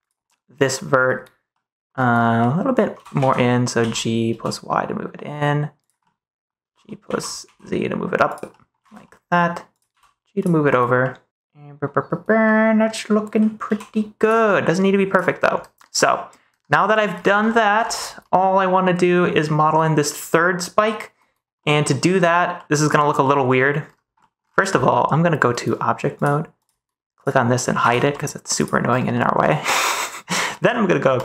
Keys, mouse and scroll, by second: 0.2 middle click, 2.3 middle click, 2.9 g, 3.1 x, 3.7 z, 4.2 y, 5.7 click, 5.9 middle click, 6.5 g, 6.9 x, 7.3 z, 8.6 click, 8.8 ctrl+s, 8.9 middle click, 9.8 g, 10.3 click, 12.4-13.4 middle drag, 13.6 g, 14.1 click, 14.5 middle click, 15.5 o, 15.9 middle click, 16.4 o, 16.8 middle click, 17.4 middle click, 17.7 shift+middle click, 20.0 middle click, 22.5 middle click, 23.1 middle click, 24.1 middle click, 24.7 middle click, 26.2 click, 27.1 click, 27.7 h, 28.0 middle click, 28.5 click, 29.0 middle click, 29.8 ctrl+s, 30.4 middle click.